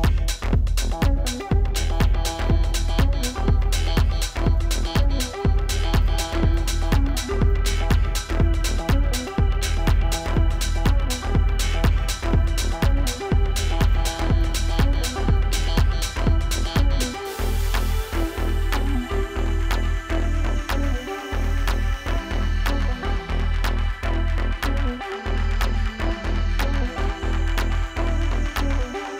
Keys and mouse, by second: 7.2 click, 9.1 space, 9.4 click, 9.6 space, 10.7 click, 12.3 ctrl+-, 13.0 v, 13.2 click, 22.6 click, 26.7 click.